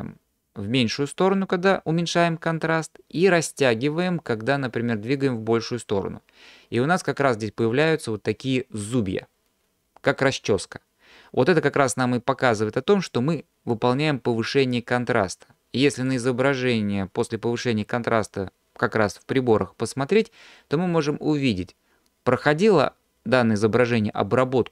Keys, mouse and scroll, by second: 3.7-7.7 drag, 13.7-16.1 drag.